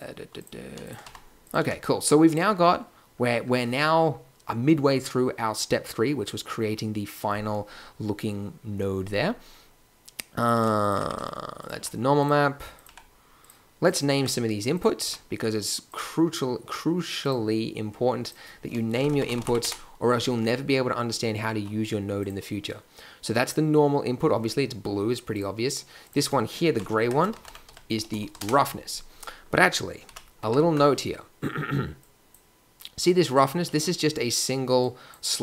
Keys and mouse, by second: 1.0 g, 1.6 a, 10.9 g, 11.7 g, 12.8 g, 14.1 Tab, 15.0 n, 28.2 s, 30.0 n, 30.4 Tab, 34.7-35.4 drag.